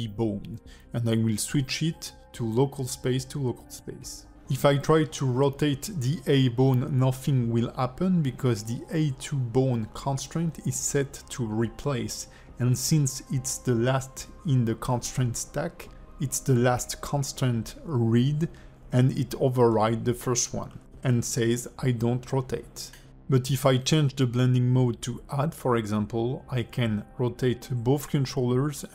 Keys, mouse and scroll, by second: 1.0 alt+middle click, 1.9 click, 3.2 click, 22.0 alt+middle click, 22.4 click, 22.9 r, 25.2 r, 27.8 alt+r, 28.2 click, 28.7 alt+r.